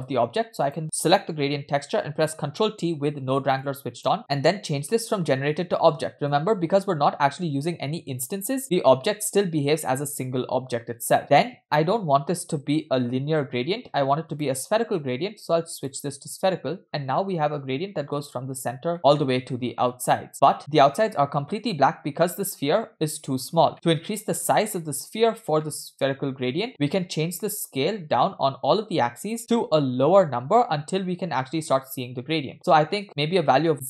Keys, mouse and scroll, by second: 0.7 click, 2.6 ctrl+t, 3.6-4.1 drag, 4.4-5.1 scroll up 2, 5.8-6.6 drag, 8.6-9.4 middle drag, 11.2-12.6 scroll up 2, 14.3-16.1 drag, 18.9 middle click, 20.5 middle click, 23.7 middle click, 25.6-26.1 middle drag, 26.7 middle click, 27.8-33.8 shift+drag.